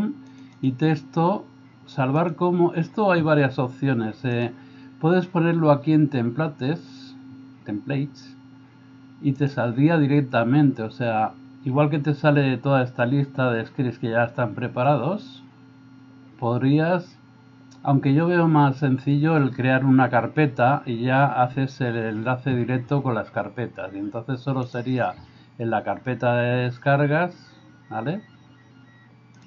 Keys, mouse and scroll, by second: 0.7-2.5 drag, 9.4-18.2 drag, 24.7 click.